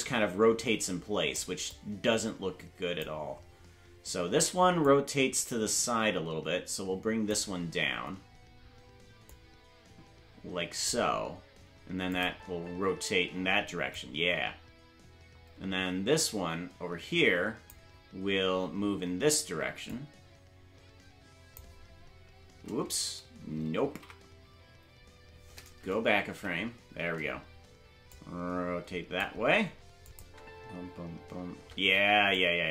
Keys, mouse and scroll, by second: 1.7-3.0 drag, 4.8-7.3 drag, 9.2-10.9 drag, 12.1 click, 12.2 space, 13.9-17.7 drag, 13.9 space, 19.9-21.6 drag, 24.4 ctrl+z, 26.3 Left, 28.1-29.2 drag, 30.0-31.5 drag, 30.2 space, 32.3-32.7 drag, 32.3 space.